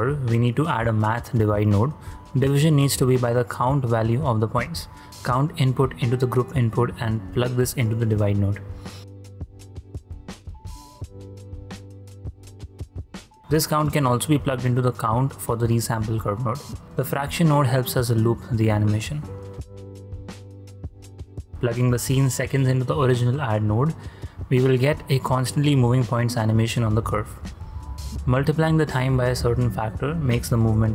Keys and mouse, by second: 0.5-1.9 drag, 5.1-6.5 drag, 7.2-8.5 drag, 10.3-14.6 drag, 16.3 click, 16.8 shift+d, 17.5 click, 18.3-20.4 drag, 21.5-22.0 drag, 22.5 shift+space, 26.0 click, 27.0 click, 27.3 shift+d, 27.9 click, 28.3-29.3 drag, 30.4 shift+space.